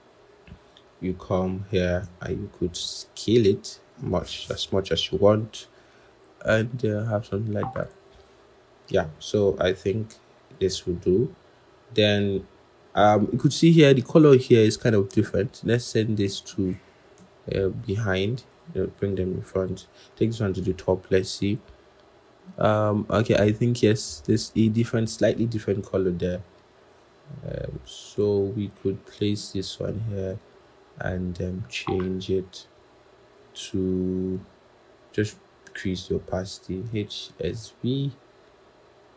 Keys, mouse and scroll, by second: 0.3-0.6 scroll, 0.6 alt+click, 2.7 shift+click, 6.9 alt+shift+click, 11.2-12.2 scroll, 16.4 shift+click, 17.8 ctrl+[, 18.3 ctrl+], 20.3 ctrl+shift+].